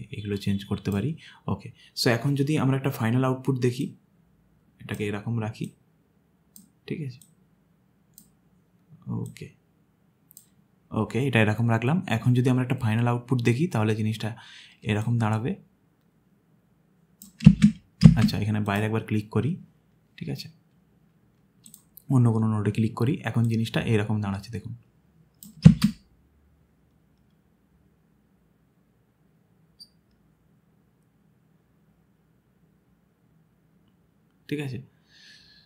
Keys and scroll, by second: 17.5 space, 18.0 space, 25.7 space.